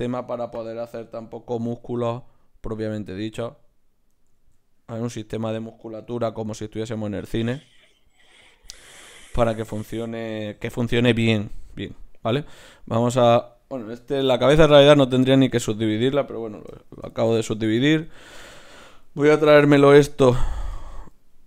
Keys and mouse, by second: 1.7 e, 3.2-4.4 right drag, 4.4 ctrl+alt+s, 6.1 ctrl+alt+s, 8.9 right click, 9.6-12.7 right drag, 9.7-12.7 drag, 10.5 w, 13.3-15.0 right drag, 14.3 ctrl+alt+s, 15.0 click, 16.7 KP_3, 18.6-20.7 drag, 19.4 g.